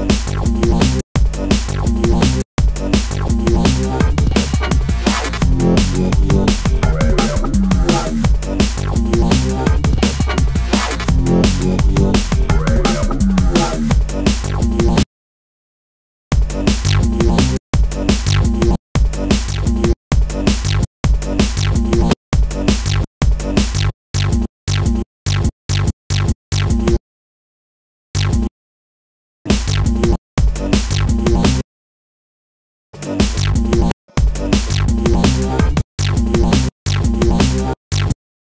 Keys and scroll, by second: 1.2 space, 13.8 space, 15.0 space, 16.3 space, 26.1 super+space, 26.2 super+e, 26.8 super+space, 29.7 super+space, 30.0 super+z, 31.2 space, 31.6 space, 34.1 super+z, 34.6 space.